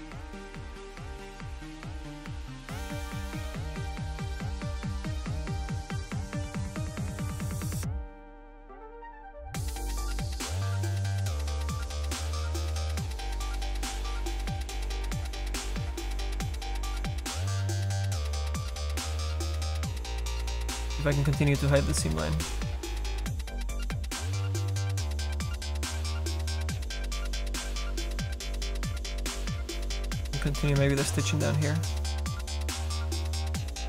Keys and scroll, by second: 24.5 s.